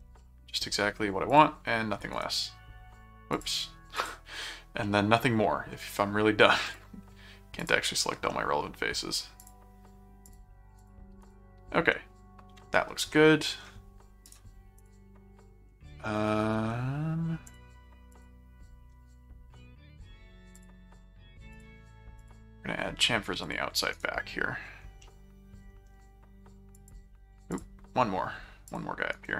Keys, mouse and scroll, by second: 0.2 middle click, 1.3 click, 2.1 right click, 3.3 click, 3.9 click, 4.8 middle click, 6.7 click, 7.6 click, 8.3 middle click, 9.4 click, 10.3 click, 11.2 right click, 11.9 middle click, 13.1 middle click, 14.3 right click, 14.8 click, 17.5 click, 18.1 click, 20.5 click, 21.5 click, 22.2 click, 23.4 click, 23.9 right click, 25.0 middle click, 26.7 click, 27.5 click, 28.7 click, 29.1 right click.